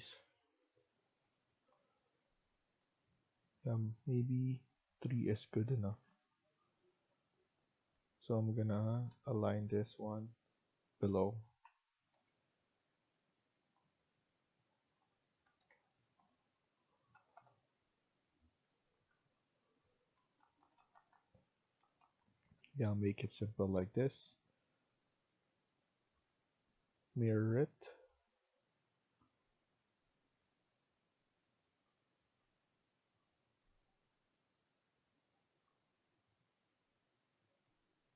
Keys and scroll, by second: 2.5 Escape, 2.7 Escape, 5.5 Down, 5.9 Down, 6.0 Down, 6.2 Down, 6.3 Down, 6.5 Down, 6.6 Down, 6.9 Down, 7.0-7.7 Down, 7.9 Down, 8.6 Down, 8.9 Down, 9.0 Down, 9.2 Down, 9.3 Down, 9.6 Down, 11.5-12.1 typing, 15.3 Escape, 15.6 Escape, 17.1 Down, 17.3 Down, 18.9 Tab, 20.1 Down, 20.3 Down, 20.5 Down, 20.7 Down, 20.9 Down, 21.0 Down, 21.2 Down, 21.3 Down, 21.5 Down, 21.7 Down, 21.9 Down, 22.2 Down, 22.4 Down, 23.7 shift+Escape.